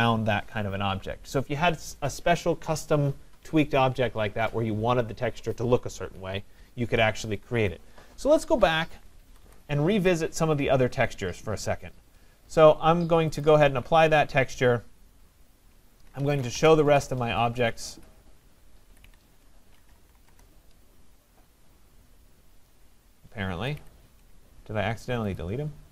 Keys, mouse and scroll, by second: 9.4 Escape, 9.5 Escape, 10.1-10.8 scroll, 13.4 click, 15.8-17.1 typing, 19.1 Escape, 19.7-20.8 typing, 23.6 Escape, 23.8 Escape.